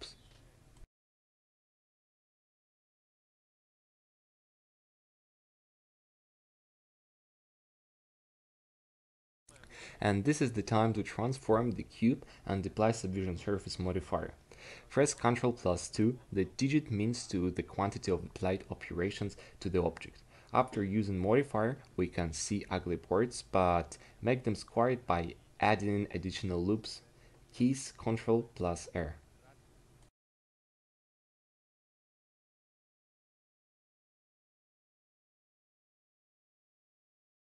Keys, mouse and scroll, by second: 14.4 Tab, 15.6 ctrl+2, 16.7 Tab, 17.9 ctrl+r, 24.8 ctrl+r, 29.8 ctrl+r, 32.0 ctrl+r, 35.8 ctrl+r.